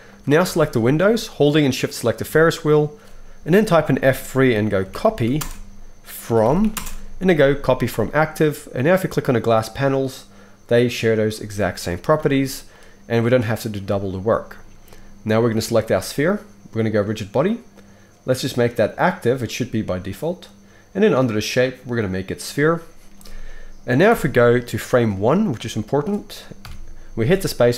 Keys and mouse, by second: 0.2-9.3 shift+middle drag, 4.0 F3, 9.3-11.1 drag, 11.1-12.1 middle drag, 12.2 alt+a, 15.4 click, 17.0-27.7 drag, 24.0 Left, 26.6 KP_1, 27.2 space.